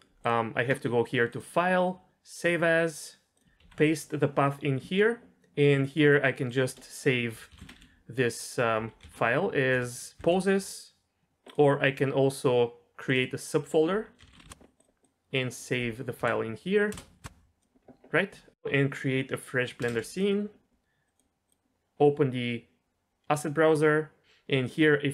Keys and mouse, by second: 1.3-2.6 drag, 18.5 ctrl+s, 19.8 ctrl+n, 21.0-23.8 drag, 25.0-25.1 drag.